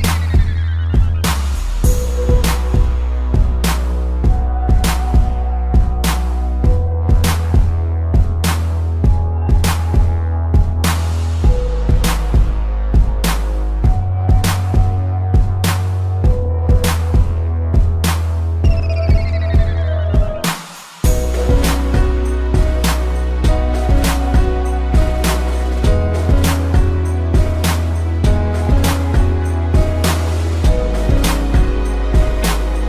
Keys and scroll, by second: 4.7 space, 11.8 space, 20.2 space, 23.0 space, 28.6 space, 31.1 space.